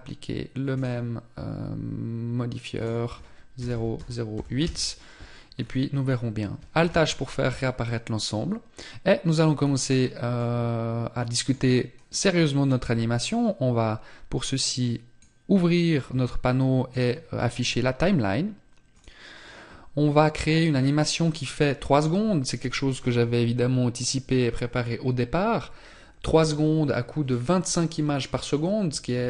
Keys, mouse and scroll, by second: 2.2 click, 5.0 scroll down 1, 5.5 scroll down 3, 6.3 alt+h, 6.9-8.3 scroll down 3, 9.0-9.5 scroll down 2, 9.8 middle click, 12.7 click, 16.4 click, 18.5 click, 19.6-20.0 scroll down 2.